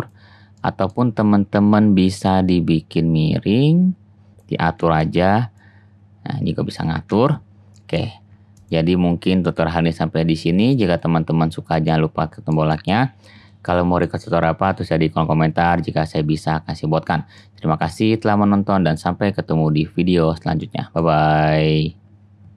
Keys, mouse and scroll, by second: 2.3-4.8 drag, 5.0 ctrl+z, 7.0 ctrl+z, 11.2-12.6 drag, 12.9 shift+middle click, 13.4-14.1 shift+drag.